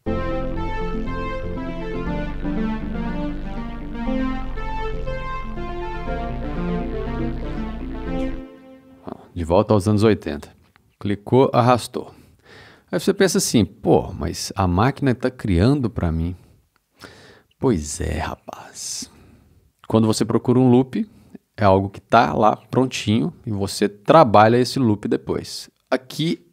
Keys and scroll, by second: 8.2 space.